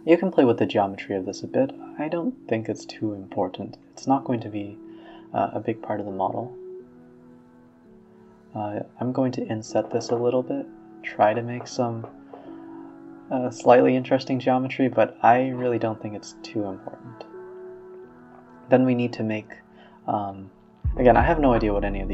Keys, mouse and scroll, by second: 0.1-3.0 typing, 4.3 middle click, 4.7 a, 4.8 a, 5.1 click, 5.5 middle click, 6.3 shift+click, 6.4 shift+click, 6.9 middle click, 7.2 ctrl+z, 8.3 i, 9.2 e, 9.3 s, 10.7 s, 11.5-12.1 drag, 12.1 s, 13.2 Tab, 13.3-15.4 middle drag, 15.4 s, 16.1-16.8 middle drag, 16.9 middle drag, 17.2 click, 17.5 shift+a, 18.3-18.9 scroll down 4, 18.9 g, 19.4 s, 20.4 g.